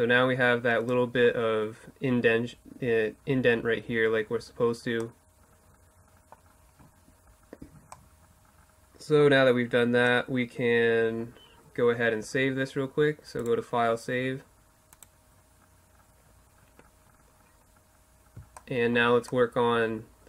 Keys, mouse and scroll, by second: 4.3-7.9 middle drag, 12.4-16.3 drag, 16.3-20.2 middle drag.